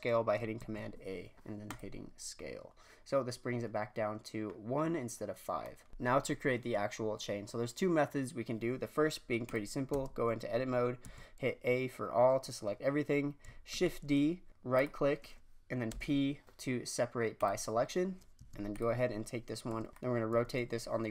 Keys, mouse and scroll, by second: 0.5 a, 5.6 scroll down 1, 5.9 click, 9.4 click, 9.9 Tab, 11.0 a, 13.7 shift+d, 15.8 p, 18.3 Tab, 18.7 click, 19.7 r, 19.9 r, 20.3 r.